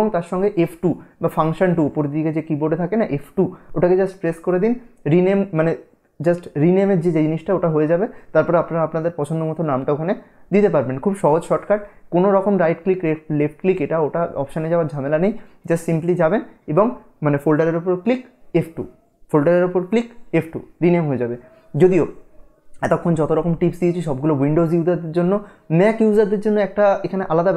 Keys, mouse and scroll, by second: 0.3 F2, 1.7 click, 3.6 F2.